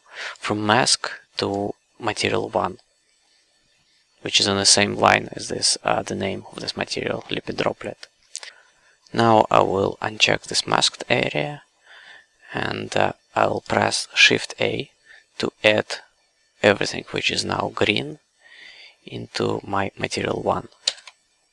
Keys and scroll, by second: 20.9 shift+a.